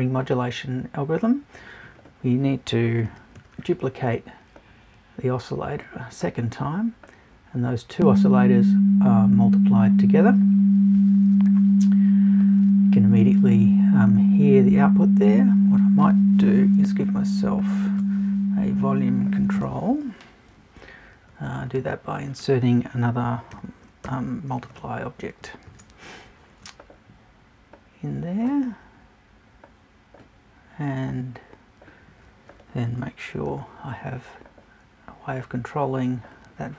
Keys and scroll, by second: 16.8 BackSpace, 19.6 BackSpace, 24.0 shift+BackSpace.